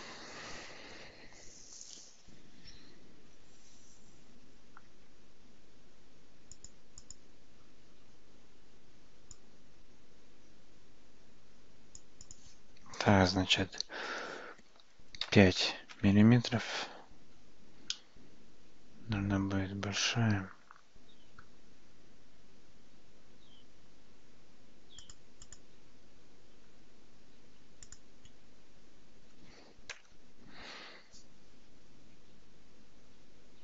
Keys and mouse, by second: 6.6 click, 7.0 click, 9.4-12.1 drag, 12.4-16.8 drag, 18.0-21.5 middle drag, 25.0 click, 27.9-31.3 drag.